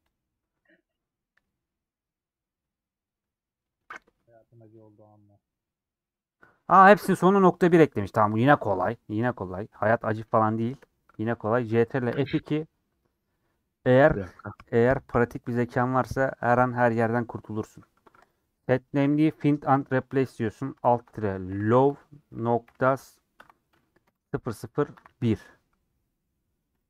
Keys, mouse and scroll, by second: 0.1 click, 9.3 click, 10.5 shift+click, 11.3-19.4 middle drag, 26.7 KP_0.